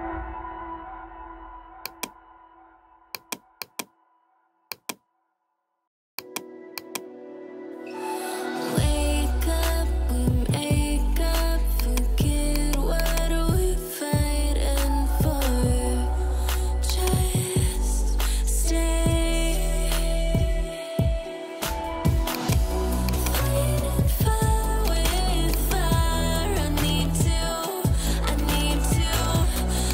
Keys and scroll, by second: 3.4 space, 6.0 space, 8.5 ctrl+0, 15.4 ].